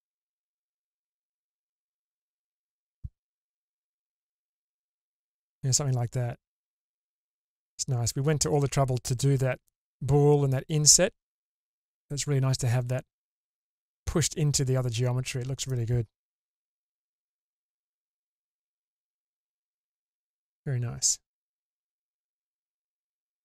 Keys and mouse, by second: 1.6-2.6 drag, 3.5 alt+z, 4.3-6.8 middle drag, 6.8-7.6 drag, 6.8-7.6 right drag, 7.6-12.7 middle drag, 13.3 middle click, 13.5 click, 13.5 right click, 14.1-15.6 middle drag, 16.8 Tab, 17.9 middle drag, 19.3-22.4 middle drag, 23.1 middle click.